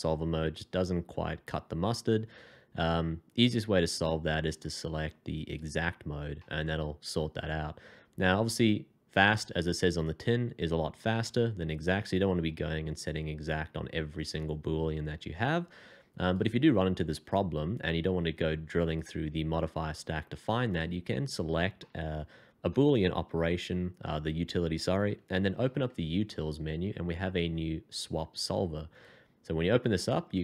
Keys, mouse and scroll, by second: 6.3 middle click, 21.8 middle click, 25.6 alt+t.